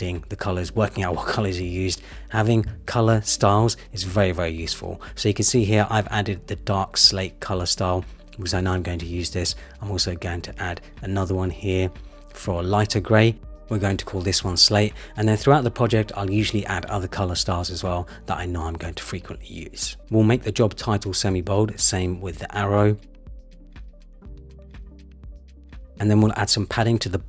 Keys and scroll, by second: 1.7 super+c, 9.3 super+v, 9.6 Return.